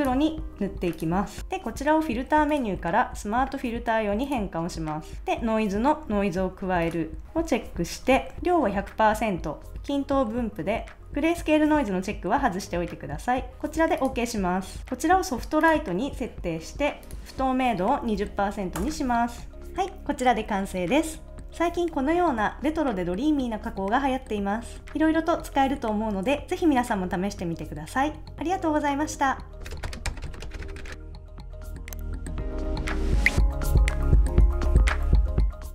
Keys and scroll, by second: 18.1 2, 18.8 Return.